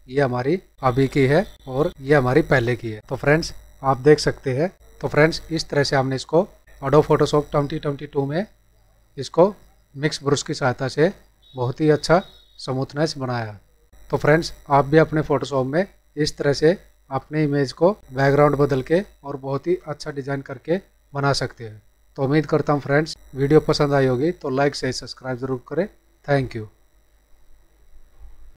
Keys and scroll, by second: 13.9 ctrl+-.